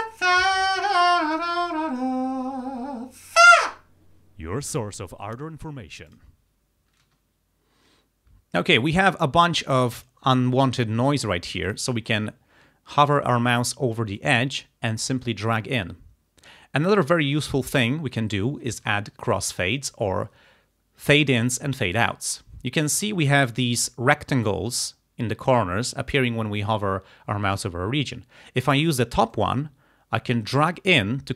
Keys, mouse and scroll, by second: 6.1 click, 7.1 space, 10.0 click, 10.8 click, 11.7 click, 14.2-17.6 drag, 29.4-31.3 drag.